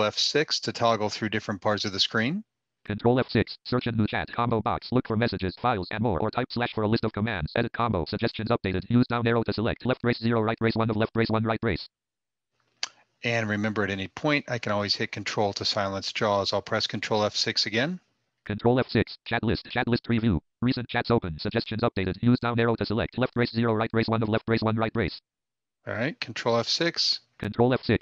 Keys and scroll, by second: 0.7 ctrl+F6.